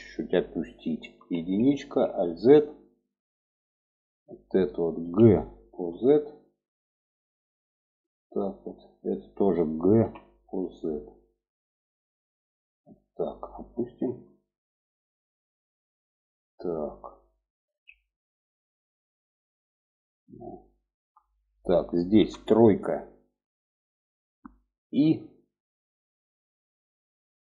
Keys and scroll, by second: 0.5 1, 1.1 alt+z, 4.3 g, 9.3 g, 17.0 alt+z, 21.5 3, 24.4 i.